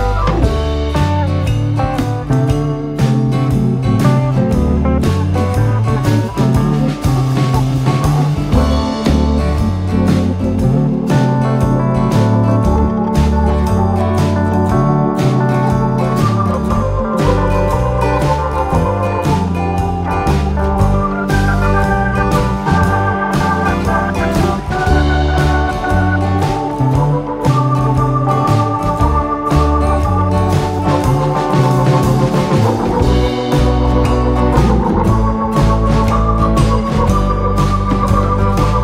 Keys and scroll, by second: 0.0 3, 0.1 ., 0.3 5, 0.6 Return, 34.4 Escape, 34.8 d, 36.9 2, 37.0 0, 37.1 Return, 38.5 Escape.